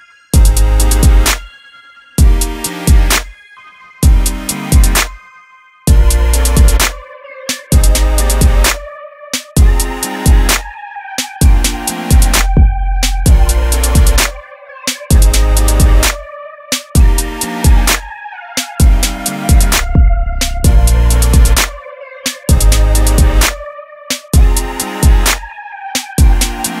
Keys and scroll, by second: 24.9-25.3 typing.